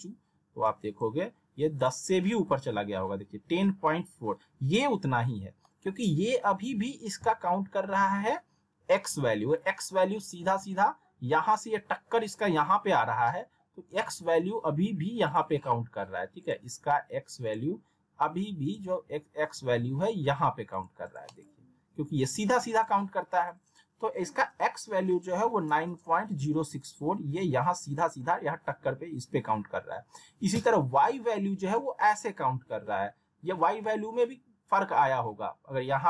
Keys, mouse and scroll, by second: 5.3 scroll down 1, 5.6 middle click, 15.3 click, 21.0 right click, 22.7 click.